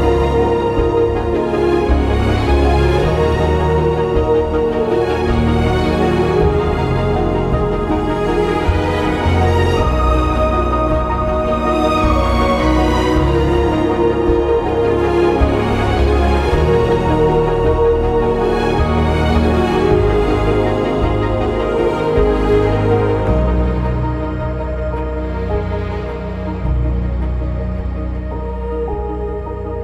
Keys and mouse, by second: 2.1 ctrl+b, 3.1 click, 5.4 k, 5.9 click, 7.4 Return, 7.9 click, 8.5 ctrl+x, 9.5 1, 9.7 click, 10.6 g, 11.3 click, 11.7 2, 13.2 ctrl+b, 15.4 ctrl+b, 18.3 2, 18.5 click, 18.7 right click, 19.5 1, 20.7 g, 21.8 click, 23.3 click, 24.1 g, 24.7 click, 25.4 g, 26.3 click, 26.8 click, 26.8 g, 27.2 click, 27.4 g, 27.7 click, 28.5 click, 28.7 g, 29.1 click.